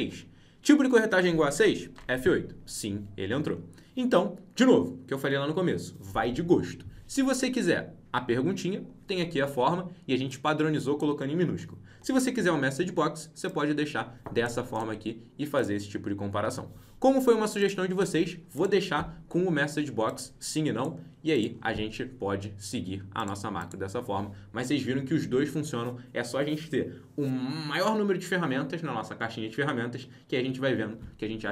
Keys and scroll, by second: 1.8 F8.